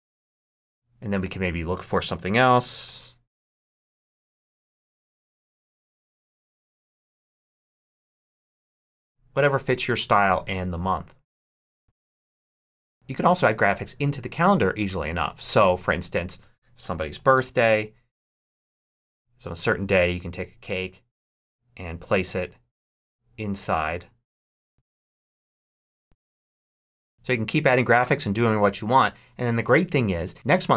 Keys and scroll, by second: 2.0-3.1 typing, 16.5-18.0 typing.